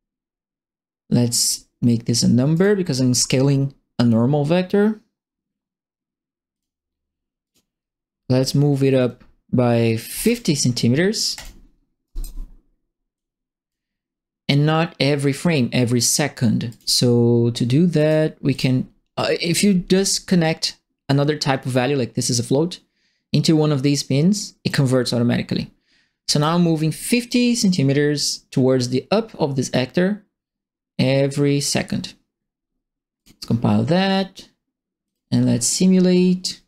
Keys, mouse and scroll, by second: 1.4 right click, 2.5 right click, 6.5 click, 7.4 click, 10.0 KP_5, 10.1 KP_0, 10.2 KP_Enter, 11.3 click, 12.0 right click, 13.1 click, 16.7 click, 17.9 right click, 18.5 click, 19.6-24.6 drag, 24.6-26.2 scroll up 1, 26.2 right click, 33.1 click, 35.0 click.